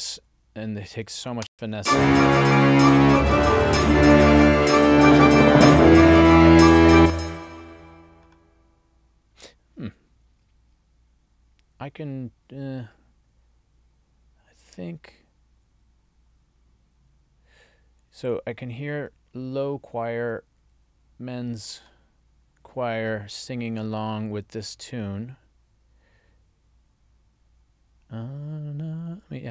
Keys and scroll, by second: 1.5 space, 6.9 space.